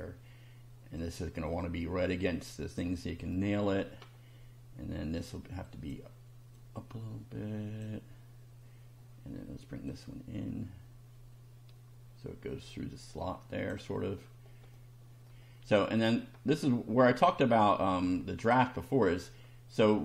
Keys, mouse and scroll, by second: 1.0-2.9 drag, 3.3 shift+middle click, 4.1 shift+scroll up 1, 5.7 click, 6.6-8.0 drag, 9.9-13.9 drag, 14.3 scroll down 1, 14.7-15.5 middle drag, 15.7-16.5 scroll up 2, 17.6-18.7 drag, 18.9 scroll down 1.